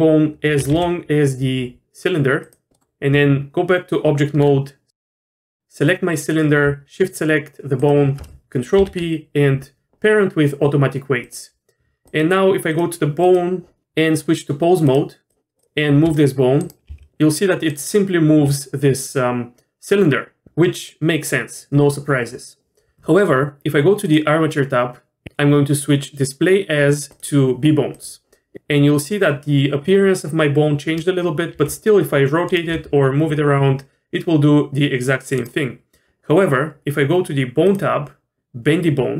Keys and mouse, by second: 0.5 g, 2.7 middle click, 3.1 Tab, 6.2 click, 8.8 ctrl+p, 12.1 click, 12.7 click, 13.2 click, 13.8 Tab, 14.8-15.3 drag, 15.6 drag, 16.0 r, 16.9 g, 25.2 ctrl+z, 27.3-28.0 drag, 31.5 r, 32.7 g.